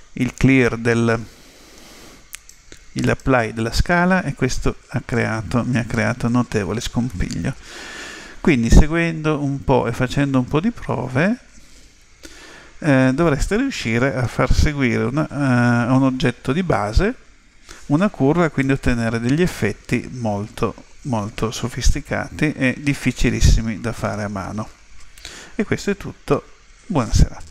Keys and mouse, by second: 1.2 Tab, 2.3 right click, 7.1-9.0 middle drag, 18.7-20.4 middle drag.